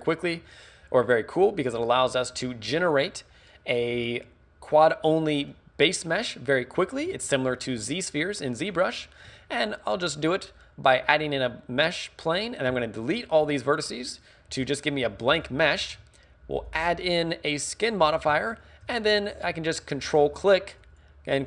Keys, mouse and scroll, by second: 2.7 middle click, 4.0 scroll up 2, 5.1 middle click, 9.4 Tab, 12.7 x, 14.5 KP_3, 15.0 KP_1, 15.3 KP_5, 17.2 click, 18.6 shift+middle click, 20.0 ctrl+click, 20.9 ctrl+click.